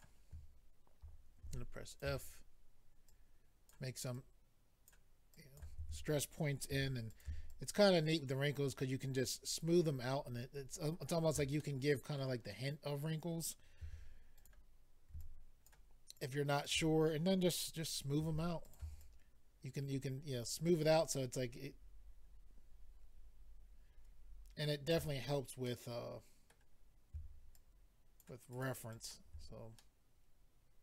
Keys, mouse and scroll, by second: 0.0 click, 1.4 ctrl+f, 1.9 click, 2.0 click, 3.0 ctrl+click, 4.1 ctrl+click, 5.3 ctrl+click, 6.7 f, 7.1 click, 7.2 click, 7.5 shift+click, 11.6 middle click, 14.4 click, 14.4 f, 14.5 click, 15.2 ctrl+click, 16.1 ctrl+click, 18.6 click, 18.6 f, 18.7 click, 19.0 shift+click, 25.3-26.1 scroll down 2, 25.6 middle click, 26.7 scroll up 2, 27.5 shift+click, 28.5 shift+click, 28.6 shift+click, 28.9 shift+click, 29.0 shift+double click, 29.3-29.8 scroll down 3, 29.8 middle click.